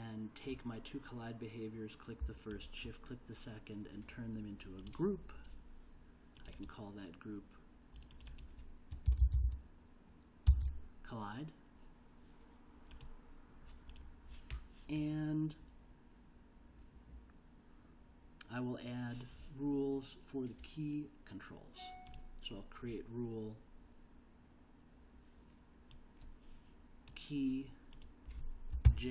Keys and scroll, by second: 8.8-11.1 typing, 28.8 shift+j.